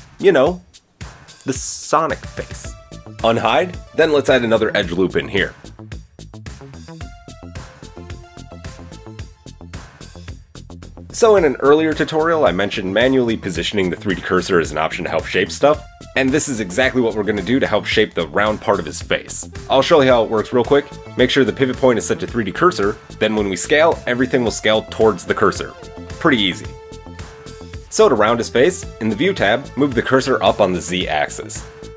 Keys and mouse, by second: 1.4 shift+middle click, 2.2 alt+h, 2.2 alt+middle click, 5.5 ctrl+r, 12.5 right click, 13.1 KP_1, 14.1-21.3 shift+middle drag, 20.5 s, 22.7-27.8 middle drag, 27.9-29.3 middle drag, 31.7 KP_1.